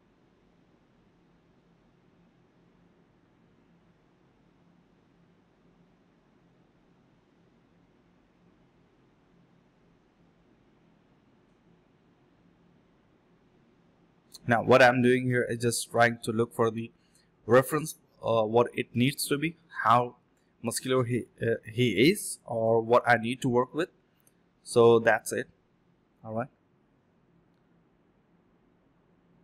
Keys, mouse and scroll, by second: 1.0 shift+click, 1.8 shift+click, 2.2 alt+click, 2.4 alt+click, 2.7 alt+click, 4.0 ctrl+z, 4.3 alt+click, 4.6 double click, 5.4 alt+click, 5.5 alt+click, 5.9 ctrl+z, 6.3 ctrl+z, 6.4 ctrl+z, 6.6 ctrl+z, 6.7 ctrl+z, 7.4 alt+click, 7.7 alt+click, 8.6 double click, 10.2 shift+click, 10.3 shift+double click, 10.4 shift+click, 10.8 alt+click, 10.9 alt+click, 11.0 alt+click, 11.5 alt+click, 11.7 alt+click, 12.5 alt+click, 12.6 alt+click, 13.4 space, 14.0 alt+middle click, 14.3 alt+scroll down 1, 14.3 middle click, 14.5 scroll up 1, 14.8 middle click, 15.1 scroll up 1, 15.8 alt+click, 15.9 alt+click, 16.6 alt+click, 16.7 alt+click, 17.2 double click, 19.4 shift+click, 21.6 alt+click, 21.8 alt+click, 22.0 alt+click, 22.2 shift+click, 22.8 alt+click, 23.1 alt+click, 23.5 alt+click, 23.7 alt+click, 23.8 alt+click, 24.3 ctrl+shift+click, 24.7 ctrl+click, 26.8 ctrl+click, 26.9 alt+click, 27.2-27.7 typing, 28.1 double click.